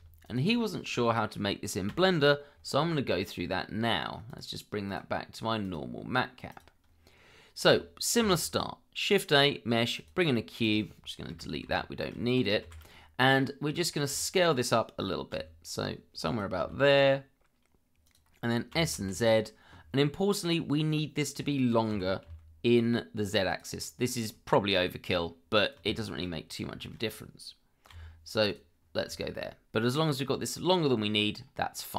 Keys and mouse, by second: 0.2 shift+click, 1.9 Delete, 4.3-6.8 drag, 8.2 shift+a, 10.6 click, 11.3 Delete, 11.6 shift+z, 12.3 click, 13.7 click, 14.2 shift+middle click, 15.3 s, 16.6 g, 18.7 s, 18.9 z, 21.9 g, 22.2 z, 23.5-25.2 drag, 25.9 shift+middle drag, 26.8 shift+middle drag, 27.9 g, 28.5-28.8 drag, 29.2 shift+middle drag.